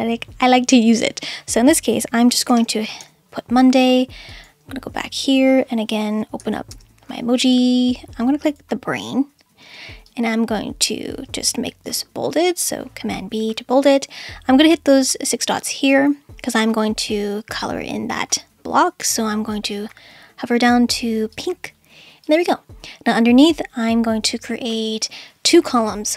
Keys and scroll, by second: 2.1-3.5 typing, 6.7 super+space, 9.6 space, 11.8 super+b.